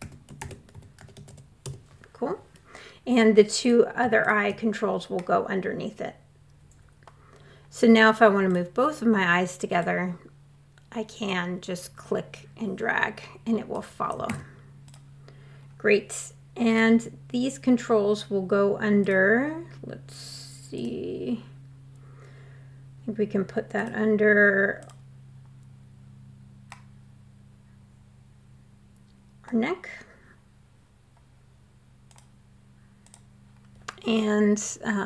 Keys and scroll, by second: 0.0-0.7 typing, 1.0 Return, 13.7 super+z.